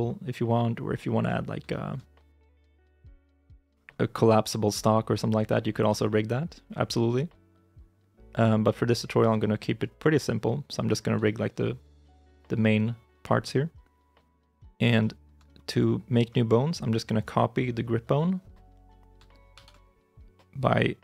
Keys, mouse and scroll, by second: 0.6 scroll down 1, 1.1 middle click, 1.5 shift+middle click, 2.2 middle click, 2.7 shift+middle click, 3.1 shift+middle click, 3.4 shift+middle click, 3.7 scroll up 1, 5.3 shift+middle click, 5.8 shift+middle click, 6.9 middle click, 9.2 shift+i, 10.2-10.7 scroll down 1, 10.7 middle click, 11.1 shift+middle click, 14.8 shift+middle click, 17.0 right click, 18.2-19.0 scroll up 1, 19.4 shift+z.